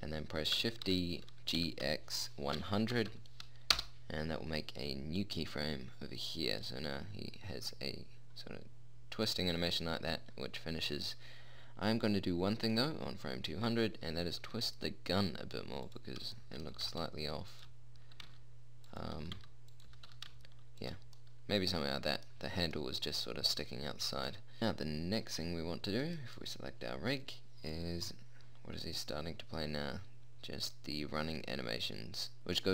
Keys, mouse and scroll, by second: 1.2 shift+d, 5.5-8.2 middle drag, 8.7-11.0 middle drag, 14.8 r, 16.8-17.8 middle drag, 17.1 g, 18.5 r, 19.6 g, 20.2 g, 26.4 right click, 29.8 middle click.